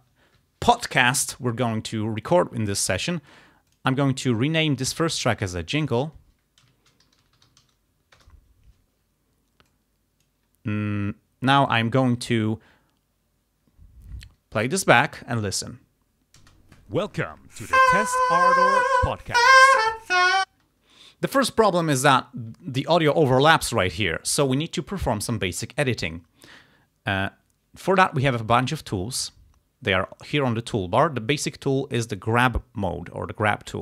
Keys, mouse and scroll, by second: 3.7 click, 5.8 click, 6.7-8.1 typing, 8.2 Return, 9.7 click, 14.3 click, 15.1 ctrl+scroll up 2, 16.4 space, 20.5 space.